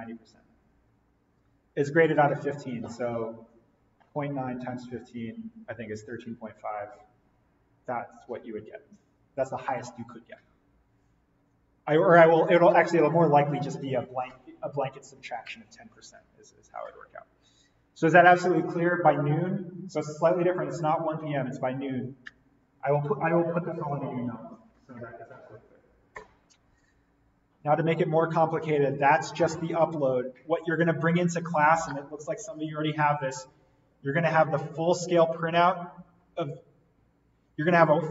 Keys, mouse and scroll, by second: 11.3-11.8 scroll up 1, 27.5-30.0 scroll down 1.